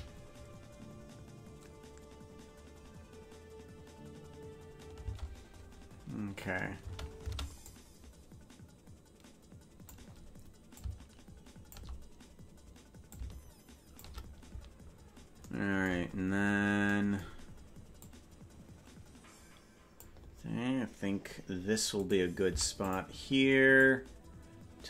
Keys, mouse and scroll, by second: 6.8 space, 7.7-10.0 drag, 7.7 space, 10.7-11.8 drag, 13.0 click, 14.7 scroll down 1, 14.8 scroll up 2, 15.0 scroll down 4, 15.0-16.0 scroll up 2, 16.0-16.8 scroll up 8, 18.0-20.1 drag, 22.1 right click, 22.4 i, 23.8-24.8 drag.